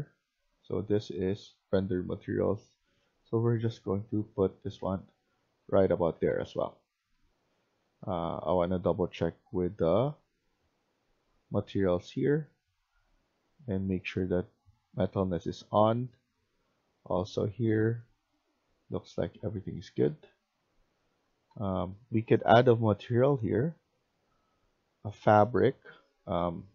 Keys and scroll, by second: 0.0-2.0 typing, 4.0-7.7 typing, 18.3-21.9 typing.